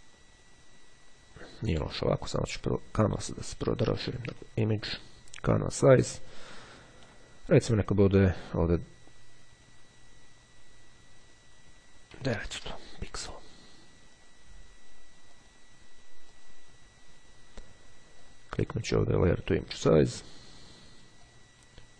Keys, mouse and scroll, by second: 3.7 click, 5.6 click, 7.0-8.3 drag, 10.2 KP_9, 14.2 click, 15.4 click, 16.2 click, 18.3 click, 21.2 click.